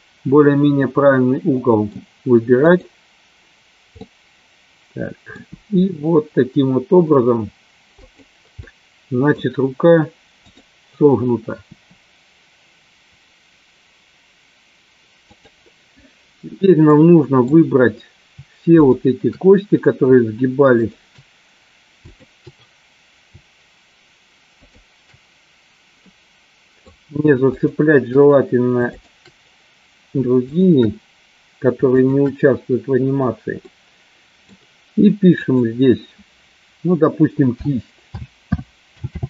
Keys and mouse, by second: 0.8-2.0 middle drag, 2.7 click, 4.1-5.3 middle drag, 5.7 r, 8.3 click, 8.6 middle click, 12.0 r, 16.8 middle click, 18.7 shift+click, 26.0 middle click, 28.8 shift+click, 30.5 shift+click, 33.6 middle click, 35.3-39.2 drag.